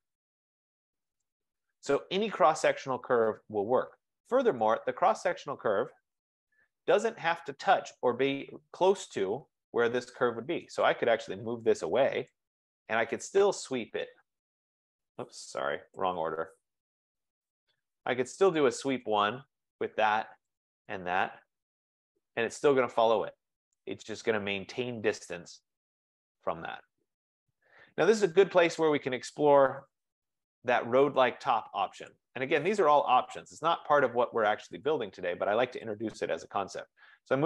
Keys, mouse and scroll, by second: 1.3 right click, 2.0-2.6 scroll, 3.6 scroll, 4.7 click, 5.5-6.8 typing, 5.5 click, 10.9 click, 12.3 click, 12.9-14.2 typing, 15.8 Escape, 16.0-19.7 typing, 19.3 click, 20.7 click, 21.3 Return, 21.8 Return, 22.5-23.2 typing, 23.8 click, 29.3-30.5 typing, 31.0 F15, 32.2 click, 32.4-33.7 typing, 35.1 click, 36.0 click.